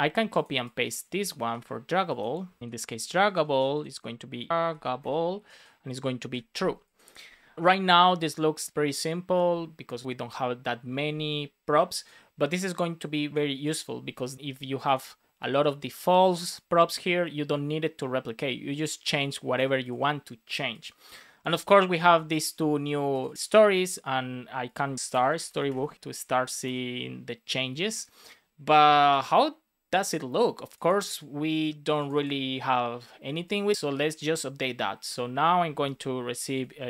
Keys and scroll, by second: 1.3 super+c, 2.6 Return, 2.7 super+c, 3.4 super+v, 4.5 shift+d, 5.3 Tab, 6.1 super+s, 25.2 space, 25.9 Return, 35.8 Return.